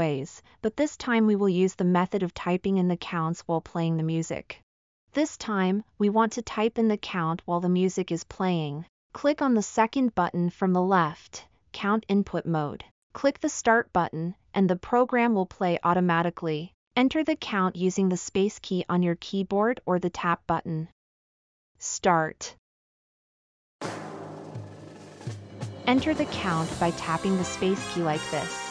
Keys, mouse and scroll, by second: 24.0 space, 24.7 space, 25.4 space, 26.1 space, 27.0 click, 27.0 right click, 27.5 space.